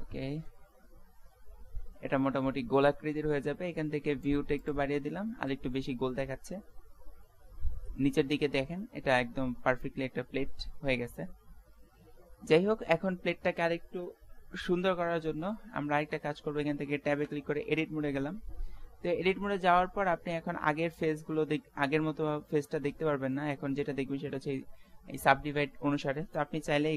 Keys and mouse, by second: 4.6-6.2 drag, 6.2-8.3 middle drag, 12.0-15.1 middle drag, 17.3 Tab, 17.9 middle click, 20.2 middle click.